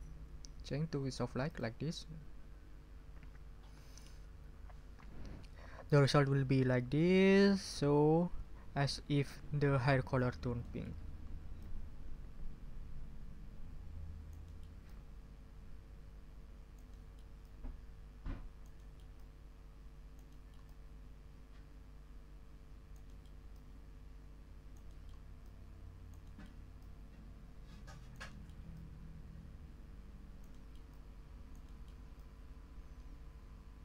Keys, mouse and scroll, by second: 1.5 click, 10.6 ctrl+click, 11.0 ctrl+scroll up 2, 11.6-14.8 ctrl+drag, 16.9 click, 17.8-23.1 drag, 23.5-24.9 drag, 25.0 scroll up 1, 25.4 click, 28.5 drag, 28.7-30.7 drag, 30.5 middle click, 30.7-31.7 scroll up 1, 31.7-32.0 scroll up 1, 31.8 click, 31.8 middle click, 32.1-33.8 drag.